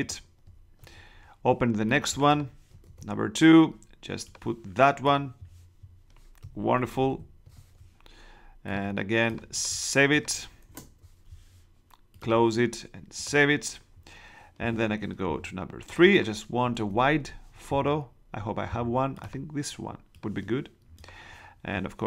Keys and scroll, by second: 2.8 super+Tab, 6.9 super+-, 10.6 shift+Return, 16.7 super+Tab.